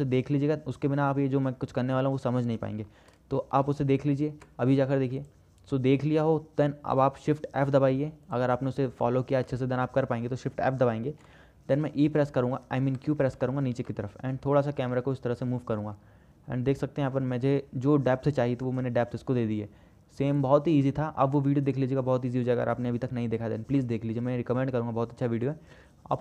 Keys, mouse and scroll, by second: 5.4 click, 8.5 click, 11.3 shift+f, 20.6 click, 20.9 click, 21.1-22.7 middle drag, 22.8 middle click, 23.2-24.1 shift+middle drag.